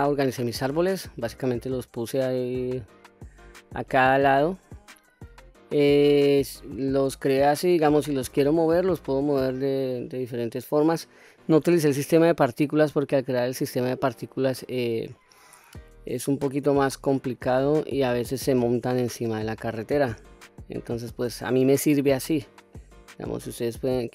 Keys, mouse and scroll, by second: 4.0-4.8 scroll down 1, 5.0-5.5 scroll up 2, 5.5-7.5 middle drag, 8.0-8.9 scroll down 1, 12.6 scroll down 1, 12.6-13.2 middle drag, 13.7-14.3 middle drag, 15.6-17.2 middle drag, 17.7-18.3 scroll up 3, 20.1-20.4 scroll down 2, 20.6-21.4 middle drag, 23.1-24.1 middle drag.